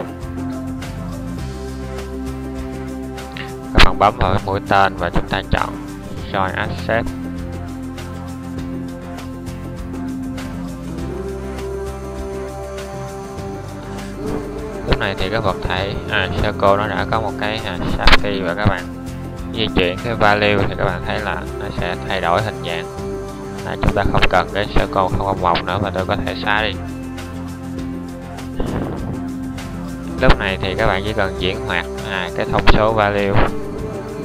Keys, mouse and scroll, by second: 4.9-5.6 middle drag, 7.4-14.6 middle drag, 18.0 middle click, 24.7 x.